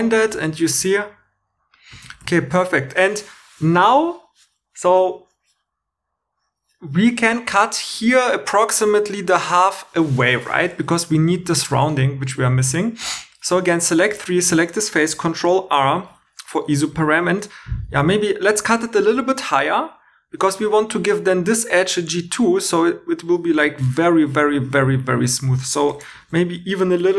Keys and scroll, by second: 0.2 shift+e, 2.1 shift+e, 13.3 3, 15.9 super+r, 16.9 Tab, 25.2 super+z, 26.1 super+r.